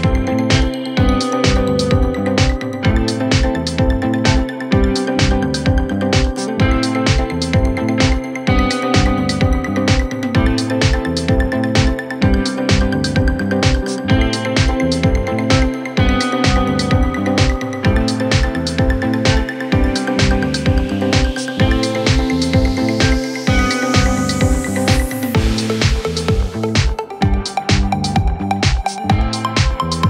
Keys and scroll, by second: 8.5 ], 12.4 ., 13.7 ctrl+z, 13.9 ., 15.6 ], 17.3 ], 26.6 ], 28.4 Escape.